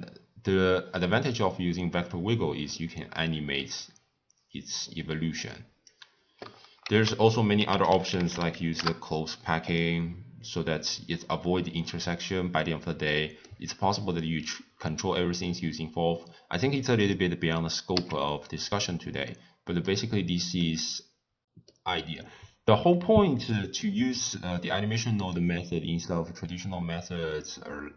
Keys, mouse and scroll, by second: 6.8 ctrl+a, 12.5 scroll down 2, 12.6 scroll up 1, 12.6-14.1 middle drag, 14.1-17.1 drag, 18.4 x, 19.2-20.5 middle drag, 20.5 scroll up 1, 20.6 scroll down 1, 20.6-22.8 middle drag, 22.8 click, 23.2 click, 23.7 scroll down 1, 23.8-26.8 middle drag, 27.3 click.